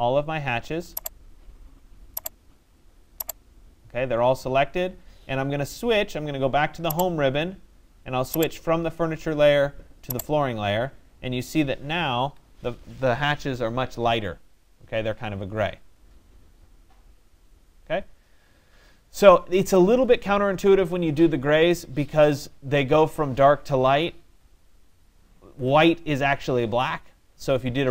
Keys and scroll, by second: 11.8 Escape.